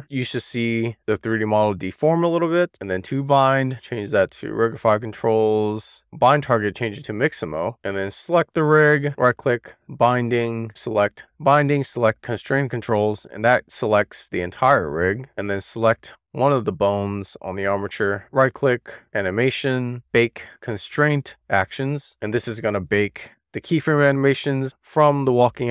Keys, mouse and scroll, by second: 0.0-1.1 scroll down 2, 1.1-2.3 scroll up 1, 2.5-4.6 drag, 5.3-7.8 drag, 9.0-13.1 right drag, 15.0 click, 15.6 click, 18.3-25.7 right drag.